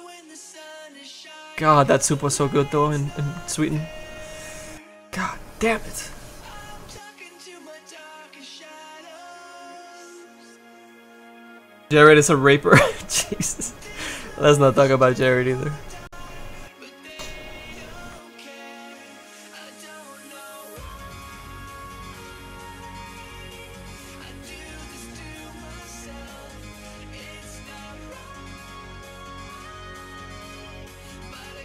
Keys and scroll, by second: 21.4 s, 22.4 s, 24.3 s, 27.8 s, 28.3 s.